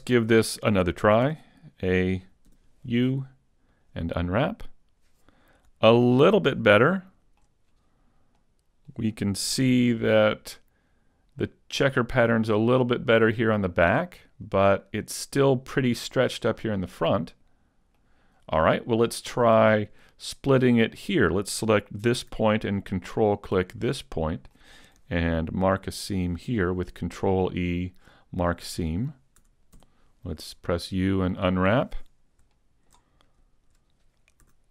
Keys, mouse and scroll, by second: 1.3 a, 2.5 u, 7.9 shift+middle click, 7.9-8.4 scroll up 5, 8.4 middle click, 9.6 a, 10.0 middle click, 12.7 scroll up 1, 12.7 middle click, 16.6 shift+middle click, 17.2 middle click, 18.7-19.2 scroll up 1, 19.2 shift+middle click, 19.2 scroll up 1, 19.7 scroll up 2, 21.0 right click, 23.3 ctrl+right click, 23.7 middle click, 26.0 ctrl+e, 29.2 a, 29.8 u, 33.5 shift+middle click, 33.5-34.5 scroll down 2, 34.5 a.